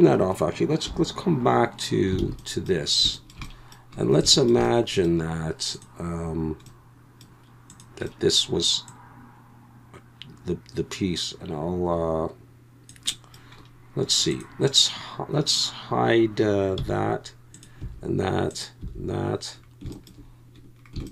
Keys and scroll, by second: 2.2 alt+a, 16.8 h, 17.8 h, 18.8 h.